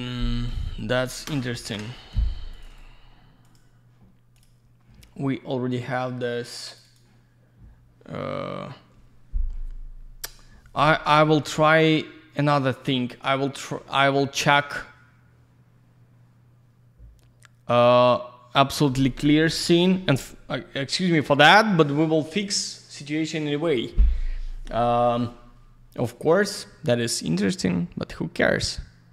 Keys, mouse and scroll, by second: 0.8 click, 0.9 click, 1.5 ctrl+shift+Escape, 6.8 ctrl+shift+click, 6.8 ctrl+shift+click, 6.9 ctrl+shift+double click, 11.4 ctrl+shift+right click, 12.4 ctrl+shift+click.